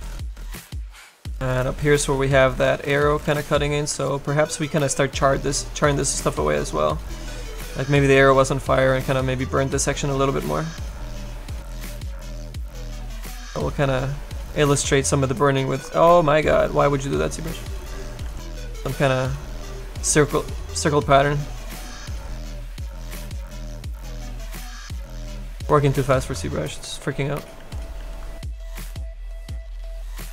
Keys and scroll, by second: 3.2 s, 3.9 s, 4.7 s, 12.9 s, 16.0 ctrl+z, 18.1 s, 22.9 s, 24.8 ctrl+z, 26.2 z, 27.5 s, 27.9 s.